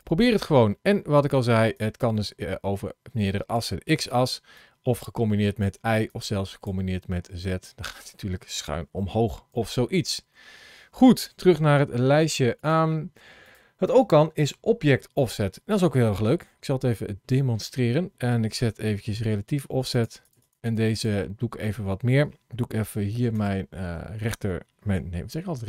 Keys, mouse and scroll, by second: 0.6 middle click, 1.6 click, 4.4 click, 6.0 click, 6.8-7.2 scroll down 2, 7.4 middle click, 9.0 ctrl+z, 9.4 ctrl+z, 19.7 click, 20.2 click, 20.4 click, 20.6 click, 20.8 click, 23.1 shift+right click.